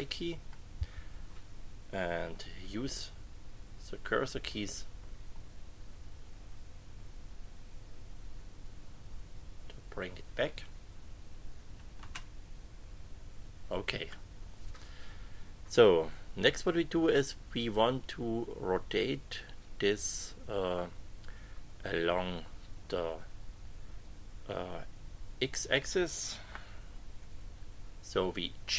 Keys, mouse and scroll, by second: 3.0 Up, 5.2 Down, 12.0 Return, 27.2 KP_6.